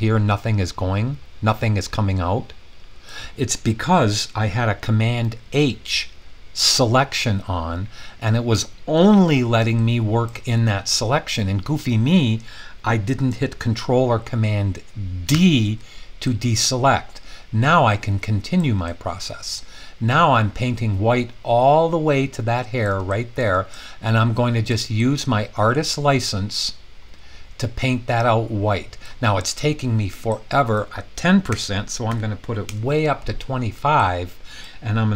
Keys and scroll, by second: 6.7 super+h, 15.3 super+d, 31.5-32.1 typing, 32.6 Return.